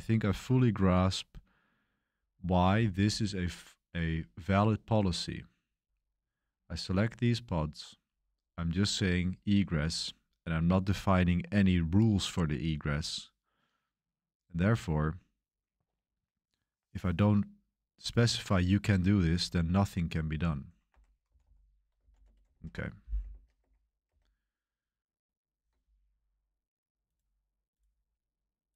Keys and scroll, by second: 0.0-0.2 typing, 2.1-3.3 typing, 4.9 j, 5.6 k, 6.3 k, 6.9 j, 7.9 j, 9.5 j, 20.2-22.6 typing, 20.8 Escape, 23.2 super+1, 23.5 super+2, 24.1 super+3.